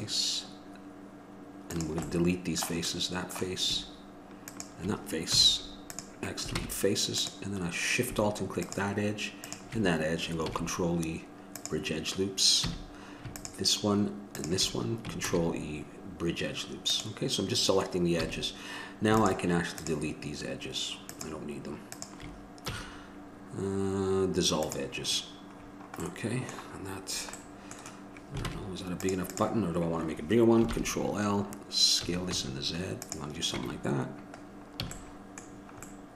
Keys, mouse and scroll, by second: 5.7-6.8 drag, 6.8 ctrl+Tab, 8.8-10.1 drag, 10.7 ctrl+e, 12.8 a, 15.5 ctrl+e, 18.4 a, 19.4-25.0 drag, 25.8-28.7 middle drag, 28.7 ctrl+Tab, 29.5-30.9 right drag, 30.9 ctrl+l, 32.3 s, 33.8 Tab, 34.6-35.6 middle drag, 35.1 a.